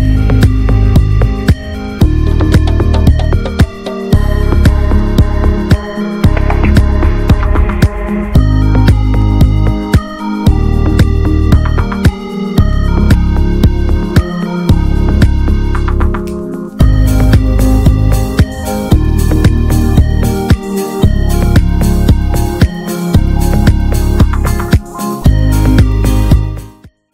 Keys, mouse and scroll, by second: 0.0-0.3 drag, 0.3-4.5 middle drag, 4.5 click, 4.8-7.8 middle drag, 7.8-8.9 drag, 8.9-11.4 middle drag, 13.1-13.7 middle drag, 13.7-14.0 scroll up 2, 14.0-14.7 middle drag, 14.9-15.2 scroll down 1, 15.2-15.6 middle drag, 15.6 scroll down 1, 15.8 shift+middle click, 15.9 scroll up 1, 16.2-19.8 middle drag, 20.7-24.0 ctrl+middle drag, 24.2 ctrl+middle click, 24.6 ctrl+s.